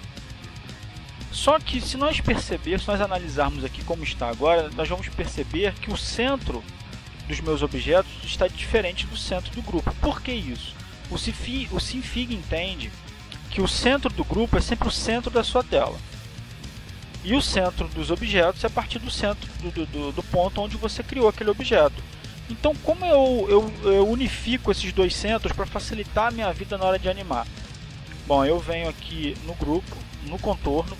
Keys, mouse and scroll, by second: 0.0 ctrl+z, 0.7 click, 1.7 ctrl+z, 2.5 click, 4.0 ctrl+z.